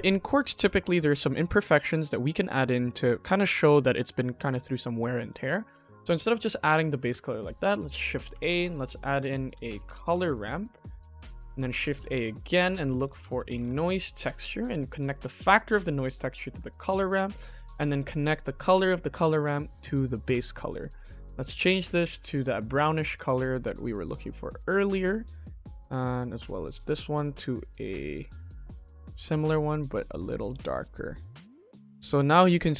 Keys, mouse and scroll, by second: 0.0 middle click, 0.4 shift+middle drag, 0.9-1.2 ctrl+middle drag, 1.5 ctrl+s, 1.9 ctrl+shift+middle click, 3.1 ctrl+shift+middle click, 5.4 shift+middle click, 7.0 shift+a, 8.7 p, 11.1 shift+middle click, 11.5 shift+a, 14.9-16.4 drag, 16.6-17.0 shift+middle drag, 18.5-20.0 drag, 20.5-20.9 shift+middle drag, 21.3 click, 21.7 click, 25.2 click, 25.7 click, 30.8 middle click, 31.3 scroll up 2, 31.8 middle click, 32.3 middle click.